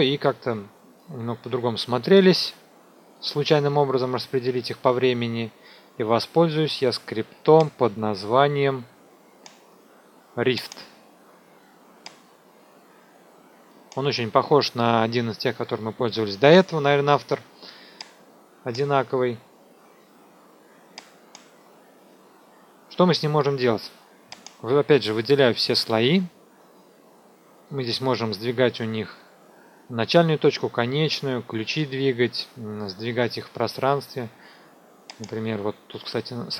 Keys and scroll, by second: 25.8 ctrl+a.